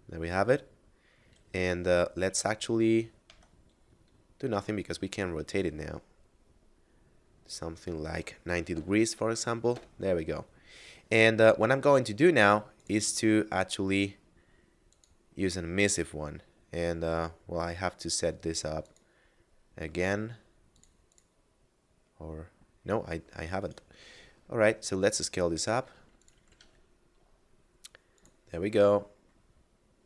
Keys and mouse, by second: 2.9 Tab, 4.1 r, 8.4 9, 8.5 0, 9.2 Return, 12.4 click, 14.6 click, 18.5 click, 23.3 right click, 23.7 s, 25.9 click, 26.2 g, 26.3 z, 27.6 click, 29.6 middle click.